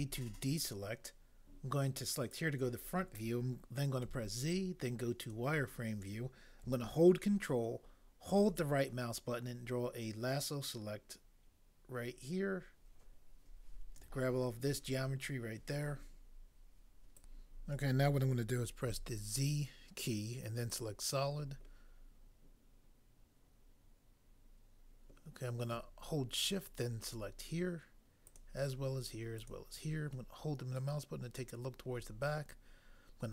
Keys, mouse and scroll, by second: 2.4 click, 4.1 z, 5.3 click, 18.9 z, 20.7 click, 27.0 click, 28.2 click, 29.4 click, 30.4 click.